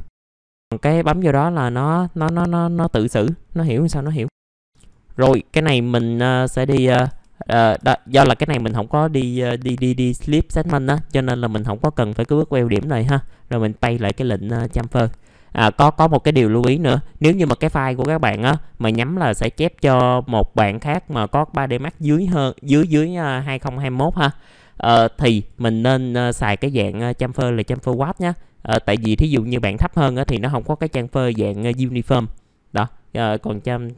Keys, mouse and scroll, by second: 0.4-1.8 drag, 2.2 middle click, 5.4 right click, 7.5 scroll up 1, 7.7 F4, 8.0 scroll up 1, 8.4 F4, 11.7 middle click, 13.8 click, 14.9 F4, 15.9 click.